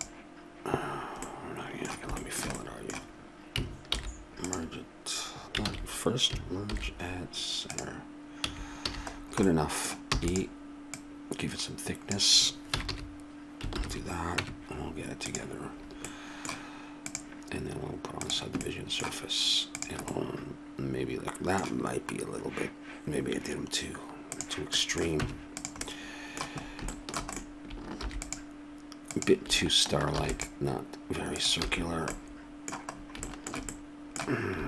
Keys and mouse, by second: 0.9 middle click, 2.2-3.9 middle drag, 3.9 alt+m, 5.7 ctrl+z, 6.7 alt+m, 8.4 a, 8.9 a, 10.1 e, 12.7 a, 12.9 a, 13.7 ctrl+n, 14.4 Tab, 19.1 middle click, 19.7 click, 20.2-21.3 middle drag, 24.3 click, 24.8 middle click, 25.2 Tab, 27.9 ctrl+r, 30.1 ctrl+r, 31.6 a, 34.1 middle click.